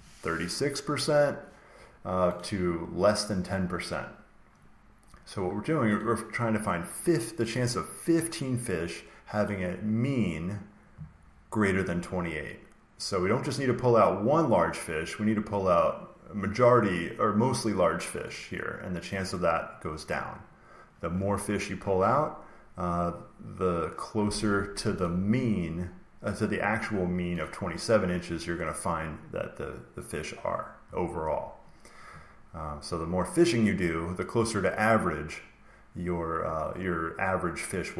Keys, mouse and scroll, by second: 2.5-4.3 drag, 5.9-8.0 drag, 9.4-11.4 drag, 11.8-13.8 drag, 18.2 click, 24.9 click, 27.3 click.